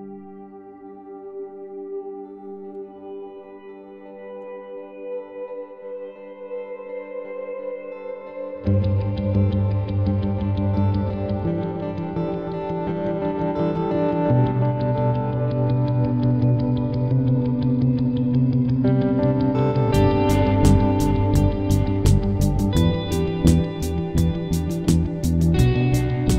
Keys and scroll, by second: 23.2 v.